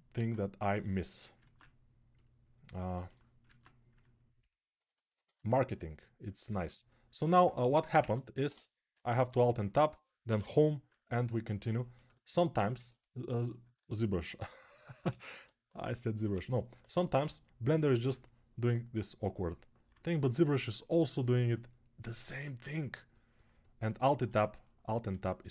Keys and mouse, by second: 1.2 ctrl+Tab, 3.4 ctrl+Tab, 8.7-11.7 alt+right drag, 10.0 Home, 10.1 Insert, 12.9-14.4 alt+right drag, 14.1 alt+q, 14.8 g, 15.2 ], 17.0 \, 17.0-17.8 ], 19.1-24.9 alt+right drag, 24.9 alt+q.